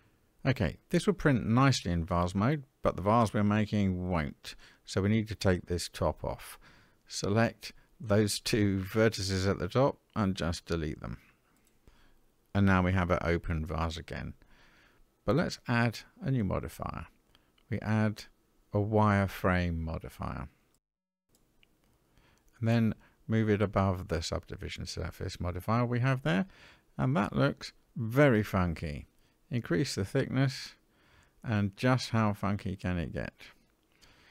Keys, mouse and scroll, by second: 1.0-2.0 scroll up 4, 2.0 middle click, 3.7 middle click, 4.9 click, 6.6 shift+click, 8.7 x, 10.2-10.9 scroll down 4, 10.9 middle click, 13.6 Tab, 15.0 click, 18.0-21.7 drag, 23.6-25.2 drag, 26.2-26.7 middle drag, 26.9-28.9 scroll up 2, 28.9-32.3 drag.